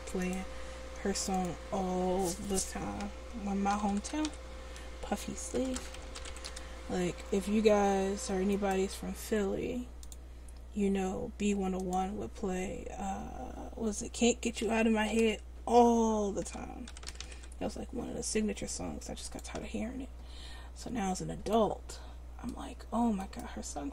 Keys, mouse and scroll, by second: 4.2 f, 6.1 e, 7.8 e, 17.2 f, 20.3 Tab, 23.2 click, 23.5 Tab.